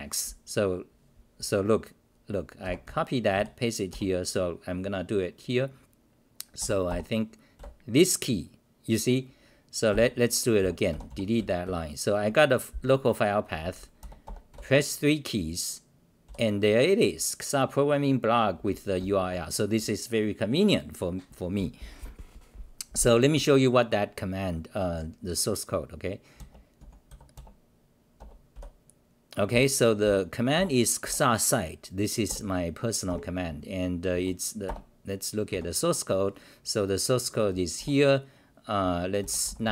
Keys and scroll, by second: 2.4-3.9 typing, 9.9-12.1 typing, 16.2 c, 18.9 r, 26.8-27.6 typing, 29.5-31.5 typing, 32.2 Tab, 33.1 ctrl+g, 34.1 r, 34.8 Return, 35.5 -, 36.7-37.2 scroll down 3, 37.7 1.